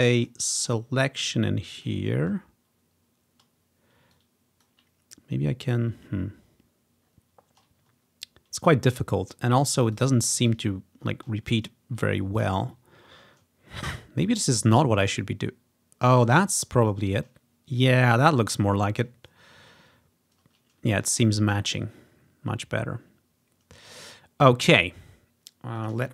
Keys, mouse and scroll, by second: 1.8 click, 2.2 ctrl+scroll up 2, 2.8 ctrl+scroll up 3, 4.2 click, 6.2-6.7 scroll down 4, 6.7 scroll up 2, 7.1 scroll down 2, 8.1 ctrl+scroll up 1, 9.4 click, 10.7-11.3 scroll down 2, 11.3-12.3 scroll down 1, 14.3-16.3 drag, 16.7 scroll up 2, 17.9-19.4 drag, 21.3 click, 21.8 ctrl+scroll down 2, 22.4-24.6 scroll down 4, 25.8 click.